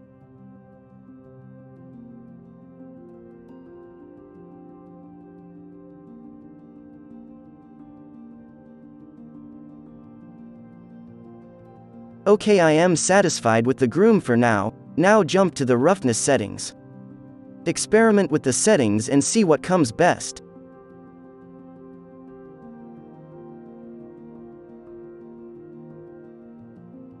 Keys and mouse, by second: 0.1 n, 0.3-2.9 middle drag, 0.5 f, 0.9-8.9 drag, 1.1-2.9 right drag, 1.3 f, 2.3 f, 4.4-6.9 middle drag, 4.5-6.9 right drag, 4.8 f, 7.6 alt+a, 8.0 ctrl+s, 8.1 z, 8.9-10.6 middle drag, 10.8 ctrl+s, 13.5 z, 13.9-16.1 middle drag, 14.6 ctrl+s, 16.7-22.5 drag, 17.5 right click, 21.9 right click, 23.0-27.2 drag, 23.0 right click, 26.9 right click.